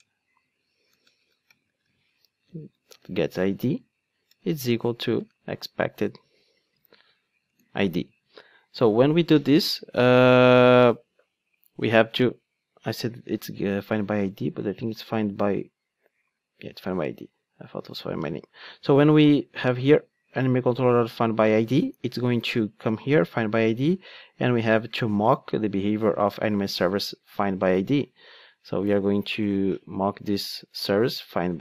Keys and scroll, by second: 2.1 Return, 2.5 alt+shift+Right, 7.5 Return, 18.0 ctrl+Tab, 27.5 ctrl+Tab.